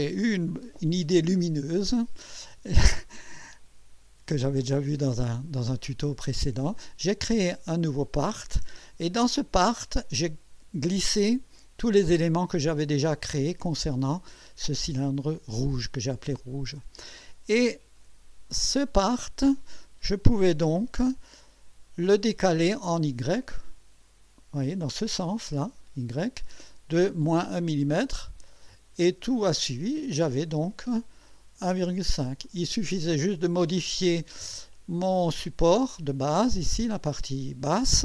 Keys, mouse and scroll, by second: 9.6 click, 17.7 click, 20.2 click, 20.7 click, 28.5 click, 30.4-31.3 drag, 32.5-33.5 drag, 34.7 click.